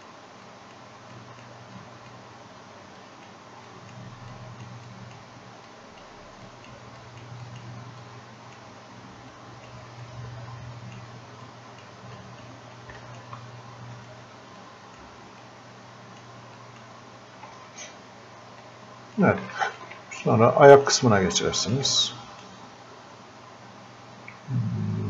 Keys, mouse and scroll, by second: 14.0 right click, 14.6-16.6 drag, 17.5 f, 18.7 click, 20.3-25.0 drag.